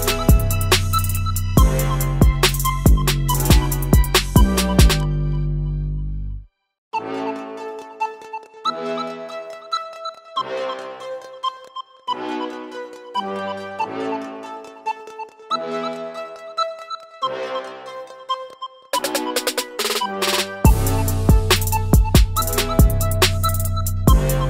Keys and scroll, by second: 1.2 i, 7.9 typing, 8.4 Return, 10.9-12.1 typing, 20.9 g.